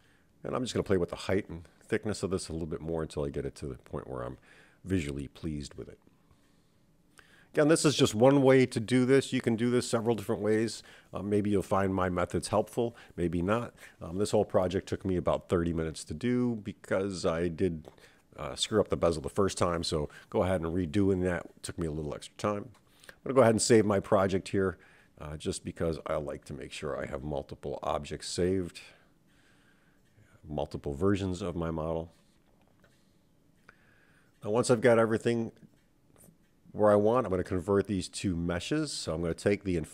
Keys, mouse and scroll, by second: 0.8-3.0 middle drag, 6.0 click, 6.9-11.4 middle drag, 11.8 click, 13.6-14.7 scroll down 2, 15.1-16.4 drag, 27.1 click, 28.3 x, 30.6 click, 34.0-37.7 right drag, 39.3 click.